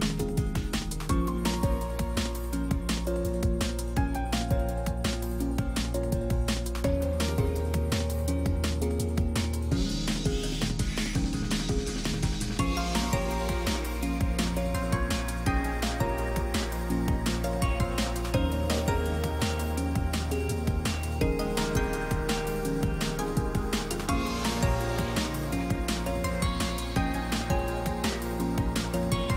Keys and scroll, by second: 0.3 space, 12.2 ctrl+space, 29.2 ctrl+space.